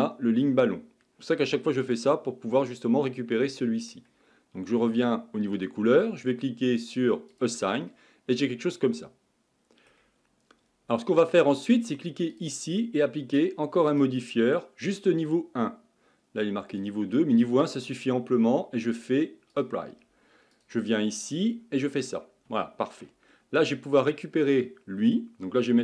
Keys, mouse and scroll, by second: 1.9-4.9 middle drag, 5.6 click, 7.3 click, 7.9-12.3 middle drag, 10.1 ctrl+z, 12.3 click, 14.1-15.5 drag, 16.7-20.6 drag, 21.5 Tab, 22.0-22.6 scroll up 6, 22.6-24.0 shift+middle drag, 24.0 click, 25.0-25.8 scroll down 4.